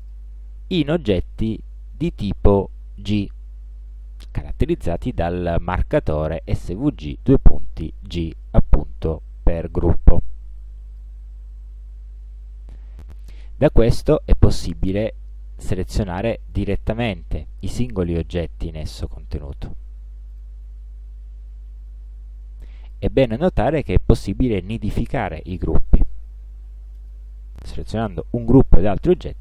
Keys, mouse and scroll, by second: 0.1 click, 10.3 click, 16.6 click, 17.9 click, 19.4 click, 20.4 click, 22.9 click, 26.0 click, 27.1 shift+click.